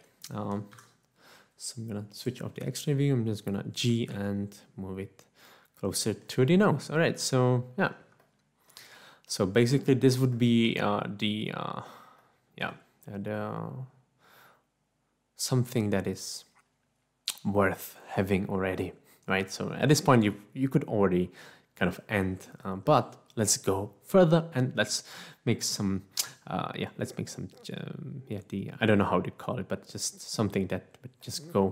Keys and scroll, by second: 1.8 3, 5.2 z.